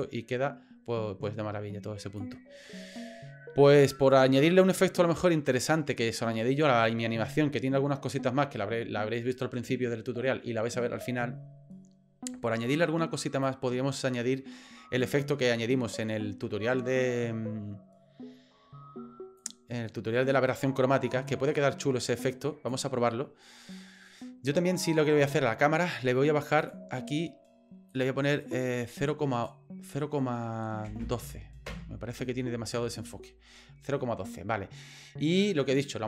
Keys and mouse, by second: 0.0-2.2 drag, 13.4-15.1 drag, 19.4-22.7 drag, 26.6 click, 28.1-32.2 drag.